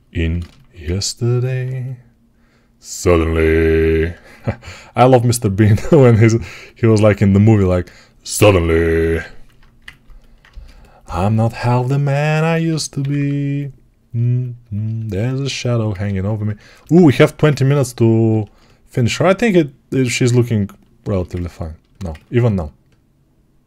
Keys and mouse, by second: 0.6-6.3 ctrl+alt+drag, 6.3-12.1 right drag, 11.6 alt+q, 12.4 g, 12.8 [, 13.0 [, 16.8-20.9 alt+drag, 20.9-23.6 alt+shift+right drag.